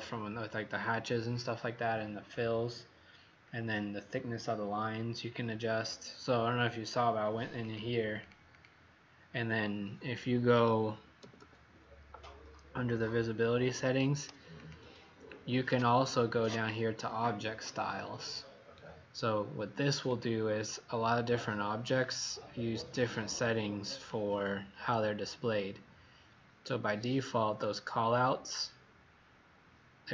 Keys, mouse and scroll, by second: 7.6 click, 11.1 typing, 14.6 click.